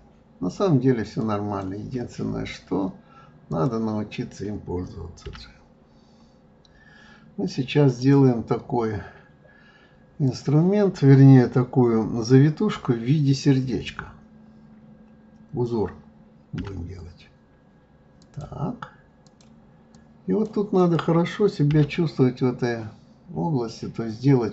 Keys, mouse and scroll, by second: 2.3-3.3 scroll down 5, 3.3 scroll down 1, 3.5 click, 5.2 g, 8.5-10.2 scroll up 2, 10.2 click, 19.2 click, 19.9 click, 20.8 click, 21.7 g.